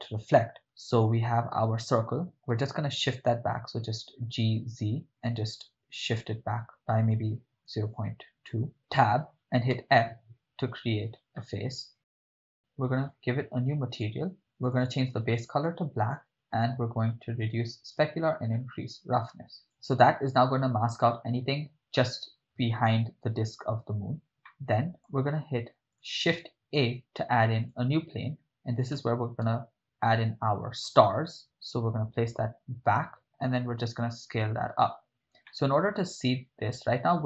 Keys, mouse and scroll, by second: 3.1 g, 3.9 z, 7.7 0, 8.0 ., 8.0 2, 8.7 Return, 8.7 -, 8.8 Tab, 9.8 f, 10.3 Tab, 11.5-12.1 middle drag, 12.3 KP_7, 13.1 click, 13.9 click, 14.6 click, 16.3-17.7 scroll down 4, 17.7-18.3 drag, 19.1 click, 20.1 click, 24.5 ctrl+middle click, 26.0 click, 26.8 shift+a, 29.0 g, 29.4 z, 33.2 Return, 33.2 KP_0, 33.9 s, 34.7 click, 35.5-36.7 ctrl+middle drag.